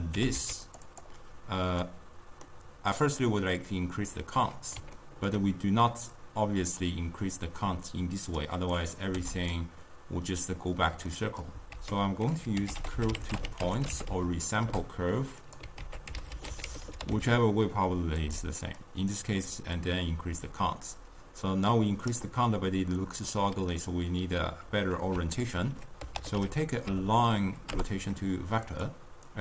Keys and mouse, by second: 2.1-6.6 middle drag, 6.6-15.6 drag, 20.0-29.4 drag.